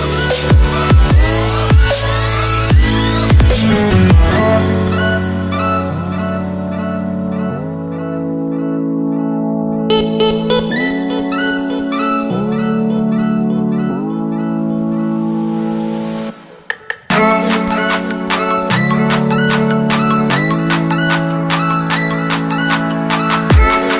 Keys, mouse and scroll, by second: 0.8 Return, 3.8 click, 5.5 Return, 8.8 click, 10.5 Return, 12.8 click, 13.6-14.7 scroll down 1, 14.7 click, 21.9 click.